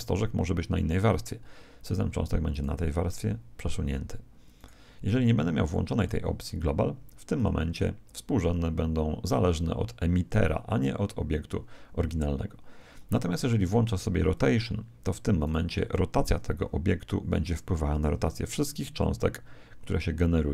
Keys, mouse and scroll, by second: 2.5 right click, 4.5-7.7 right drag, 7.3 click, 14.3 click, 15.4 right click, 16.6 r.